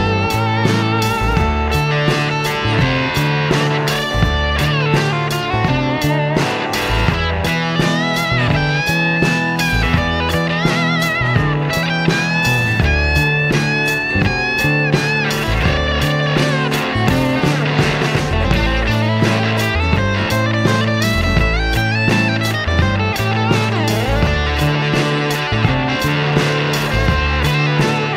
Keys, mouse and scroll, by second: 0.9 KP_Subtract, 2.0 space, 4.0-6.5 drag, 7.3 click, 7.6 space, 10.4 KP_Subtract, 17.3 shift+F6, 19.0 KP_Add, 22.4 click, 25.8 click, 27.4-28.1 drag.